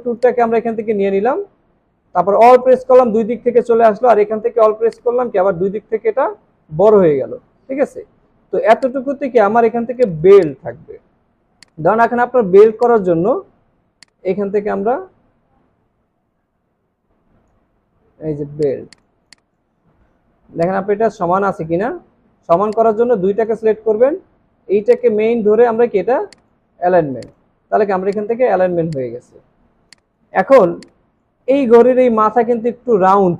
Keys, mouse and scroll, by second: 0.2 alt+click, 3.5 scroll down 1, 6.6 scroll up 1, 9.2 scroll down 1, 10.2 space, 10.4 double click, 10.8 space, 11.3 alt+scroll up 1, 19.1 space, 19.2 double click, 19.9 alt+scroll up 3, 27.8 alt+scroll down 1, 28.0 space, 28.6 alt+scroll down 1, 28.9 space, 29.6 alt+scroll up 1, 30.8 space, 32.7-33.3 alt+scroll up 1.